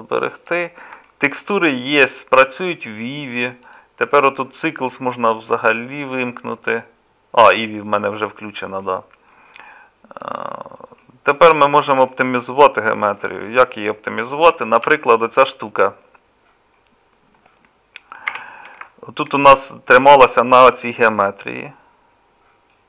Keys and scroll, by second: 14.9 KP_Divide, 18.3 Tab.